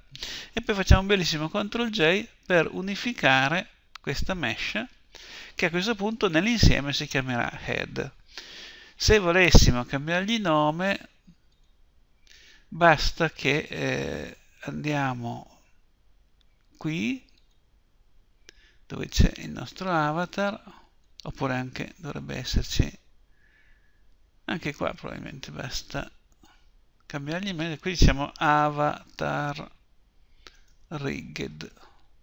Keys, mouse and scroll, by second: 3.2 ctrl+j, 11.7-13.6 drag, 13.6-17.4 middle drag, 17.4-19.2 drag, 19.6-21.4 drag, 26.2 click.